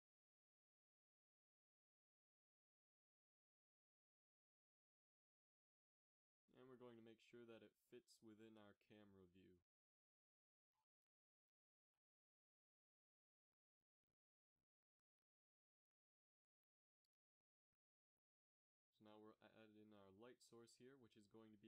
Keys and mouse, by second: 0.0 ctrl+s, 0.9 s, 3.5 s, 4.1 Tab, 4.6 a, 5.0-6.6 drag, 5.6 g, 7.1 g, 9.1 g, 10.4 Tab, 11.4-11.9 middle drag, 13.4 s, 15.0 g, 16.7 shift+a, 18.6 g, 20.4 F6.